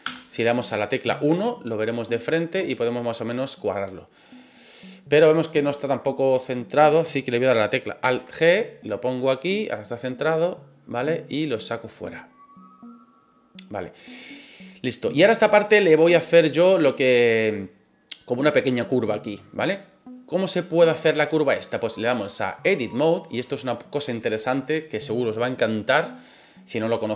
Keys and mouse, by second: 0.0 KP_1, 1.3 shift+middle click, 2.3 click, 8.0 alt+g, 8.8-10.7 drag, 10.9 middle click, 11.7-14.1 drag, 14.3-14.6 middle drag, 15.1 middle drag, 17.4 middle click, 19.5 middle drag, 22.3 click.